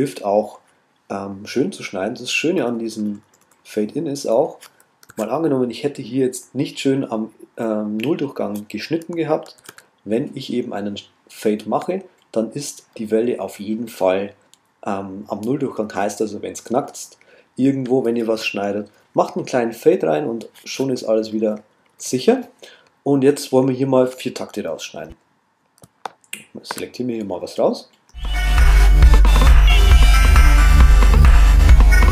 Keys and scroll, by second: 1.8 Left, 5.1 super+z, 9.6 shift+super+z.